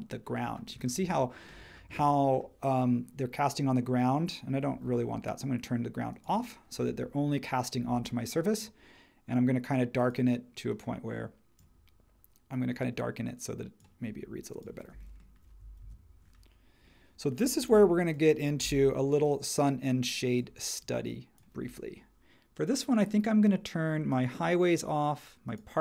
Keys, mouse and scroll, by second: 15.8 super+1, 17.7 h, 18.6 h.